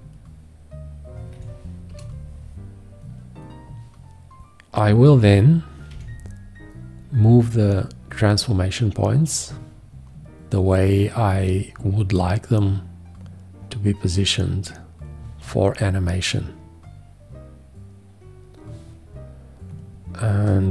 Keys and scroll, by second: 1.4 F8, 1.9 Return, 5.9 q.